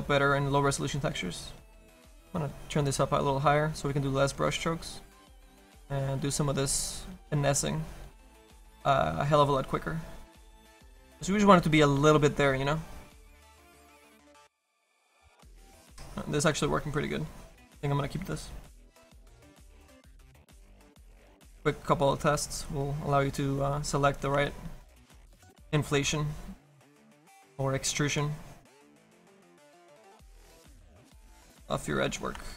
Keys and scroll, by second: 27.3 s, 28.0 s.